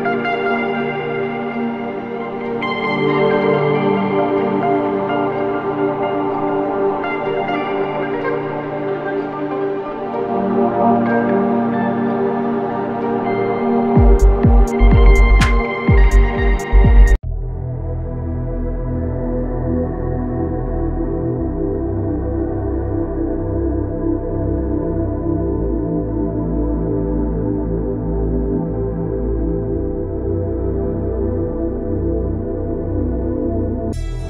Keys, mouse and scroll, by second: 0.6-1.6 typing, 2.7 click, 4.8 typing, 6.5 Return, 14.7 ctrl+Num_Lock, 14.7 click, 15.0 ctrl+space, 15.0 click, 15.4 ctrl+space, 16.2 click, 16.5 space, 18.8 space, 19.0 click, 22.3 space, 22.4 click, 22.7 space, 24.4 click, 24.7 space, 24.9 click, 27.0 ctrl+click, 27.3 ctrl+space, 29.9 click, 30.0 click, 32.5 right click, 33.6 click.